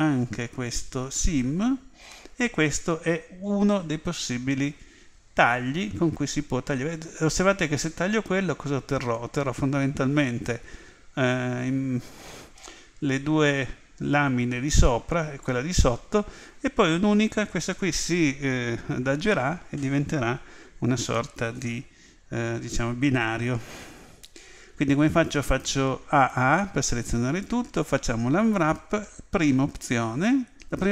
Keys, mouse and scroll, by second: 25.2 a, 26.3 a, 27.9 u.